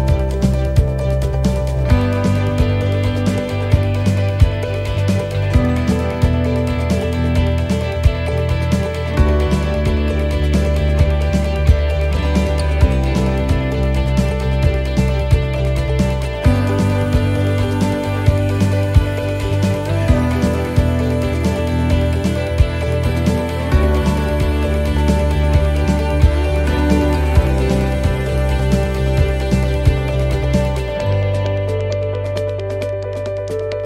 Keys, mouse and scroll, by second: 0.7 click, 2.0-2.8 scroll up 8, 2.8 middle click, 5.9 click, 8.2 click, 11.5 click, 18.4 click, 22.0 click, 27.1 click, 32.3 click.